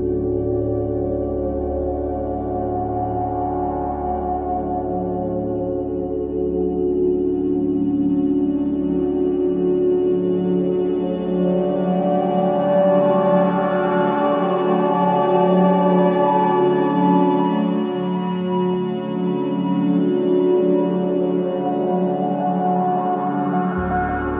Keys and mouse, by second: 3.2 shift+d, 6.7 shift+d, 9.9 shift+d, 20.2 click, 23.3 click.